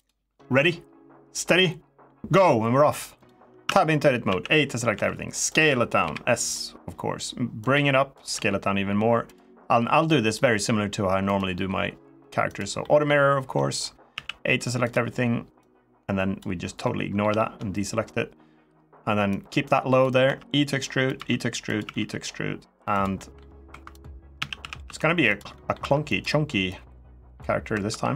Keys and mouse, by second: 3.0 click, 3.4 Tab, 4.0 a, 4.7 s, 5.2 click, 5.8 KP_1, 7.4 click, 8.1 s, 9.0 click, 9.8 click, 11.0 click, 12.6 middle click, 13.3 middle click, 13.9 a, 15.4 click, 16.6 middle click, 17.1 shift+middle click, 19.0 click, 20.0 e, 20.8 click, 20.9 e, 21.4 click, 21.7 e, 22.7 click, 22.9 middle click, 23.5-25.6 typing, 23.7 click, 25.0 click, 25.3 middle click, 25.9 click, 26.5 click, 27.4 2, 27.6 3, 28.0 click.